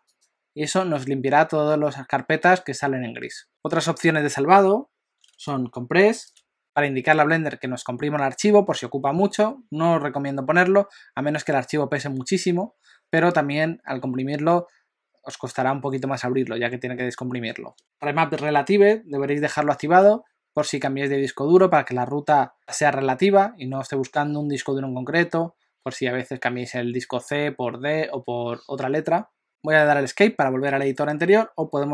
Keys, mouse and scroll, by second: 3.5 click.